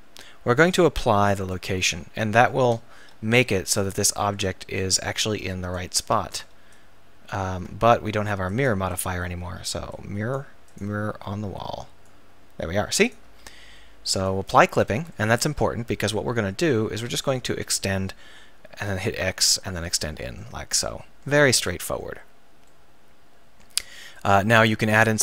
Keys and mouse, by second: 3.0 shift+c, 4.4 Tab, 5.1-8.9 drag, 6.3 ctrl+z, 7.5 ctrl+z, 12.1-13.3 drag, 13.3 ctrl+z, 16.2 Tab, 16.7 Tab, 17.5 e, 20.0 click, 21.0 click, 21.7 middle click, 22.7 middle click.